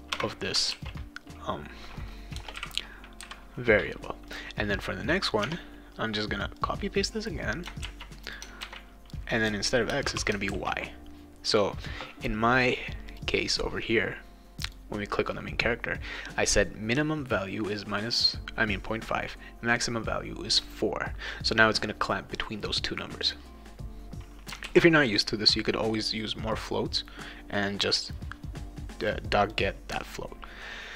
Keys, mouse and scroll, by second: 0.1 ;, 0.7 ctrl+s, 2.4 BackSpace, 2.6 ,, 4.3 click, 5.4 Tab, 6.6-7.6 drag, 7.9 ctrl+c, 8.3 click, 8.6 ctrl+v, 9.9 BackSpace, 10.1 y, 10.5 ctrl+s, 13.1 click, 14.6 click, 23.2 click, 24.6 ctrl+s, 29.0 click, 29.4 click.